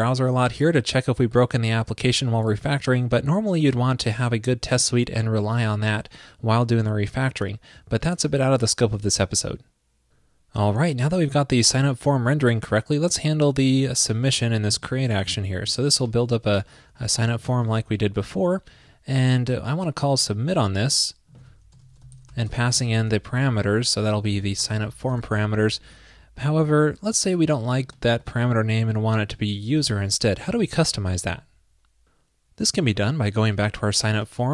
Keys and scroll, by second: 16.6 super+c, 17.6 super+v, 20.3 super+c, 21.5 super+v, 23.0 ctrl+p, 30.5 super+s.